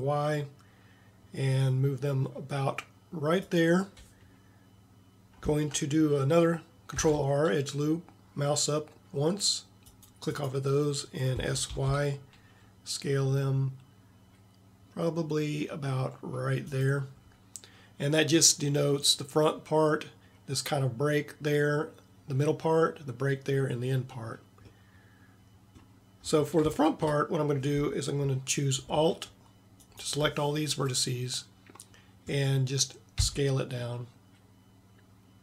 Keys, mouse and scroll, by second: 7.0 ctrl+r, 11.4 s, 29.8-31.9 middle drag, 33.2 s.